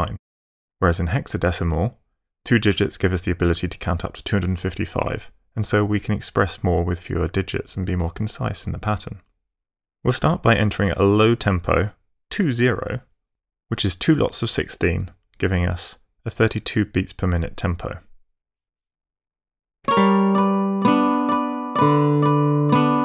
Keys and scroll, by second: 12.3 2, 19.8 space.